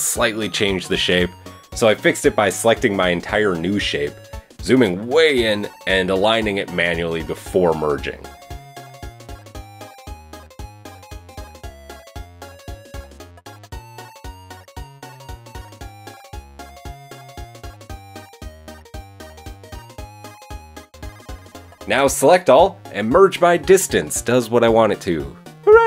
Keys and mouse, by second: 0.3 g, 0.6 ctrl+z, 1.0 shift+middle click, 1.2 a, 3.1 ctrl+l, 5.9 g, 12.4-14.8 shift+middle drag, 15.1 g, 20.4 shift+middle click, 21.7 a, 23.3 m, 24.1 Tab, 24.7-25.2 shift+middle drag, 25.5 shift+middle click.